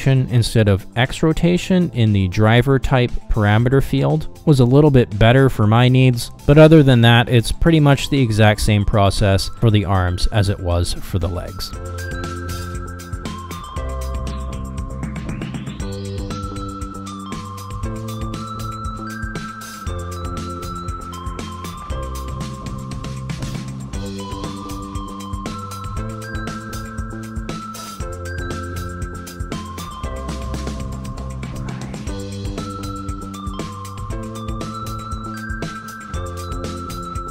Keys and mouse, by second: 2.8 click, 3.3-7.0 drag, 7.4 click, 9.3 ctrl+Tab, 10.0 middle click, 10.5 shift+middle click, 10.9 middle click, 11.8 f, 12.5 shift+click, 14.4 middle click, 14.8-16.5 shift+drag, 16.7 shift+click, 16.9 middle click, 17.2 shift+click, 18.0 middle click, 18.5 shift+click, 19.1 middle click, 19.3 ctrl+middle click, 19.5 middle click, 19.8 f, 20.6 shift+click, 20.9 shift+click, 24.1-37.3 right drag.